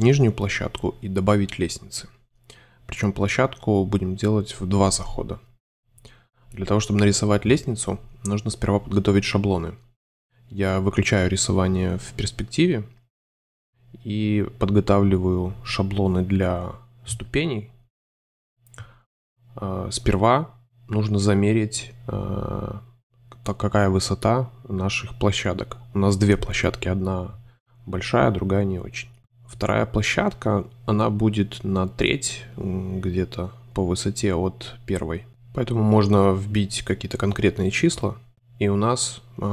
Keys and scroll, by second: 0.2 a, 1.3 super+c, 1.5 super+v, 5.6 space, 11.3 space, 13.9 shift+c, 17.0 5, 19.5 alt+shift+super+space, 20.1 super+space, 21.3 shift+super+a, 21.9 a, 22.6 c, 25.3-28.2 typing, 29.2 shift+c, 29.8 c, 30.4 super+z, 31.1 c, 32.0 shift+a, 32.5 shift+c, 34.1 ▏, 36.4 shift+space, 38.6 m.